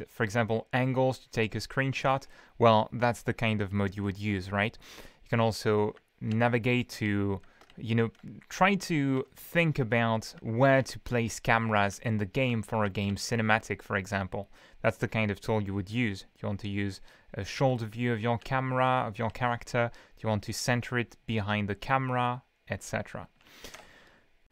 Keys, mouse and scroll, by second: 0.0-0.2 typing, 3.6 d, 5.0 w, 5.5 d, 7.0 shift+w, 7.7 shift+a, 8.1 w, 9.3 s, 10.8-13.5 typing, 17.7 a, 18.4 d, 18.9 a, 19.2 d, 22.7-23.6 typing, 23.7 Escape.